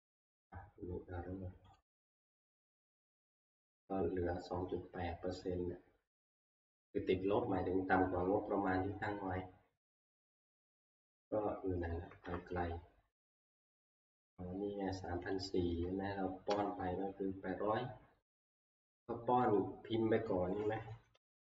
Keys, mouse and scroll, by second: 1.8 click, 6.3 click, 8.2-10.1 Right, 8.8-11.3 drag, 10.9-12.0 Left, 12.2 Left, 13.5 Left, 13.7 Left, 14.1 Left, 15.5 click, 16.5 Left, 17.0-17.6 Left, 19.6 click, 21.2 =.